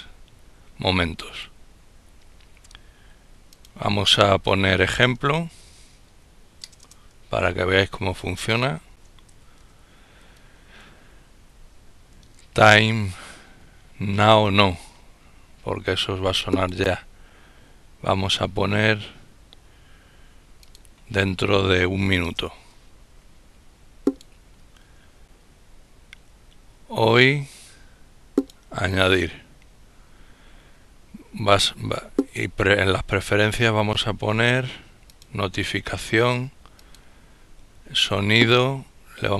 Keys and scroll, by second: 5.0-9.5 typing, 9.6 Tab, 12.0 Up, 13.0 Down, 22.2 1.